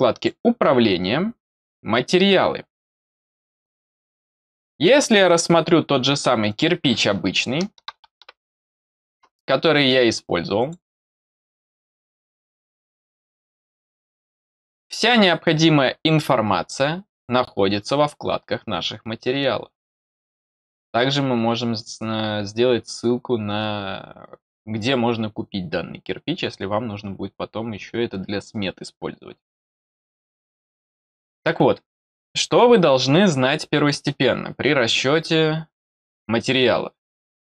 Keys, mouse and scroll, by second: 0.1 click, 1.6 click, 5.2-5.7 scroll down 3, 6.4 click, 10.5 click, 11.8 click, 17.1 click, 17.7 click.